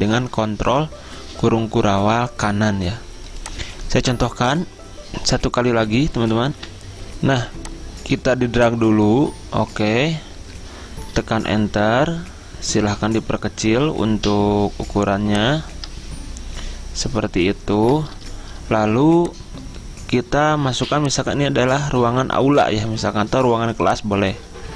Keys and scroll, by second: 6.7 F10, 6.8 ctrl+v, 10.7 Return, 18.4 Return.